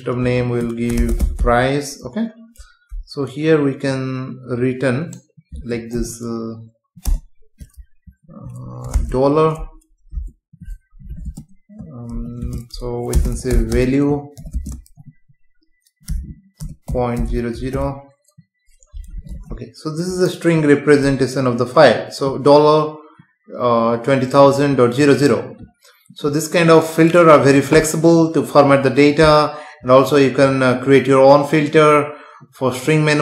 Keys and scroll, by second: 7.1 BackSpace, 10.1 space, 11.0 Right, 11.3 space, 16.6 BackSpace, 19.3 ctrl+s, 21.1 F5.